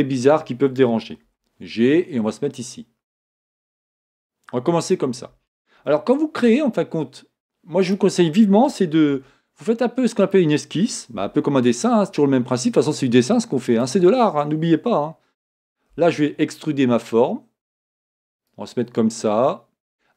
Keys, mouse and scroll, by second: 1.4 g, 5.9-9.2 shift+middle drag, 6.5-8.0 scroll up 1, 8.0 click, 9.2 r.